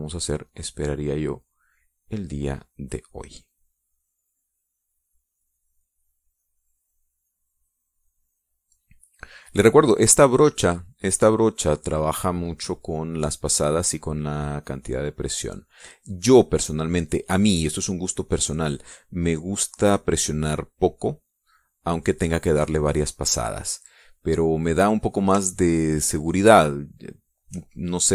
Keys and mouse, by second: 0.9-5.9 drag, 6.0-10.0 drag, 10.2 middle click, 12.1 middle click, 13.8-17.4 drag, 18.7-22.8 drag, 23.1 middle click, 26.5-28.1 shift+drag.